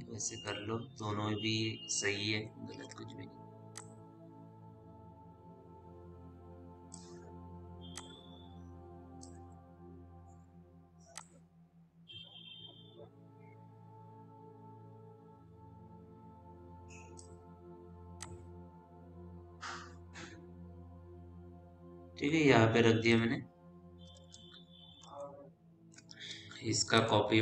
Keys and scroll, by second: 9.7 e, 10.1 r, 17.9 w, 24.5 p.